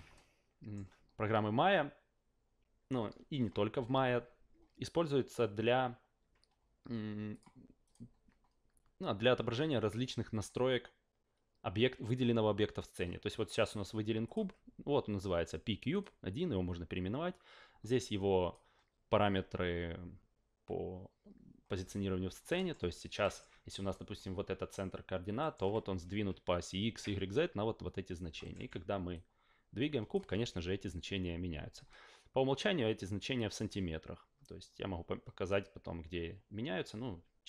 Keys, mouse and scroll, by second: 0.1-0.7 alt+middle drag, 7.3 click, 7.8 click, 14.2 click, 15.9 click, 18.0 click, 22.5 alt+middle click, 23.2 alt+middle click, 23.9 alt+right click, 25.4 alt+middle click, 28.4 alt+middle click, 29.1-30.1 drag, 30.4 ctrl+z.